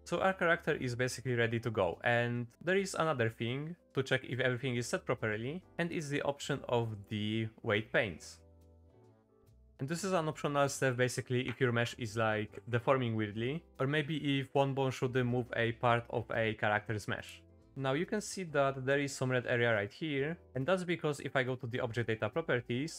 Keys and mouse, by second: 7.0-9.1 drag, 11.5 middle click.